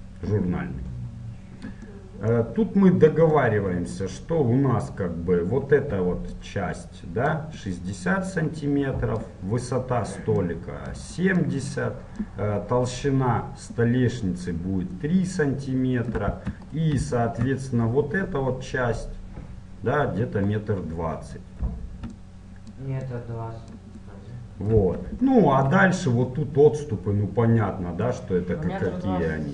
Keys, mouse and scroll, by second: 6.5-8.7 d, 9.4-15.1 d, 16.2 d, 22.3 d, 22.9-24.2 d.